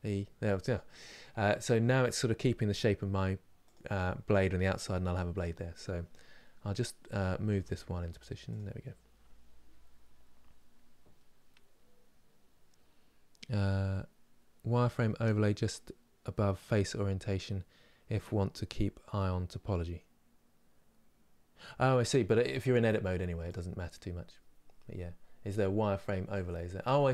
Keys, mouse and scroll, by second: 7.1 g, 23.1 click, 25.1 click.